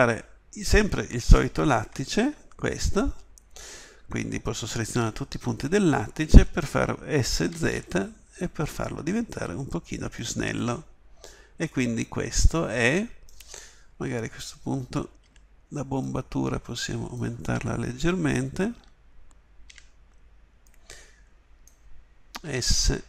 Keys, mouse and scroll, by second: 1.8 KP_1, 5.0 a, 5.3 a, 7.2 s, 13.9 KP_1, 15.2 b, 18.7 a, 19.6 b, 22.5 s.